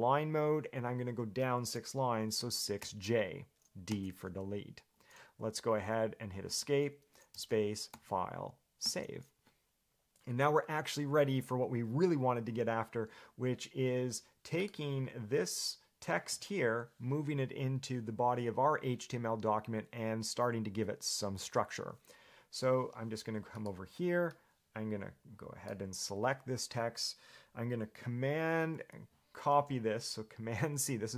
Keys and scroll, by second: 2.6 6, 3.0 j, 4.1 d, 6.7 Escape.